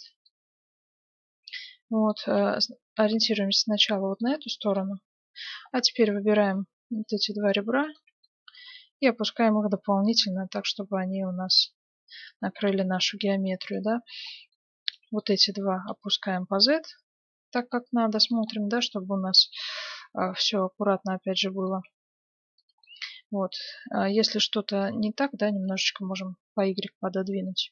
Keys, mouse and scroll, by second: 0.2-2.0 middle drag, 2.2 g, 4.7-6.5 middle drag, 5.9-9.5 right drag, 6.7 ctrl+Tab, 6.7 middle click, 8.2-10.1 middle drag, 8.8 g, 12.4-14.1 middle drag, 13.6-16.6 right drag, 14.2-16.8 middle drag, 15.7 g, 16.9 middle click, 18.5-21.4 middle drag, 21.7 g, 22.8-25.5 middle drag, 24.8-26.6 drag, 25.8-27.7 middle drag.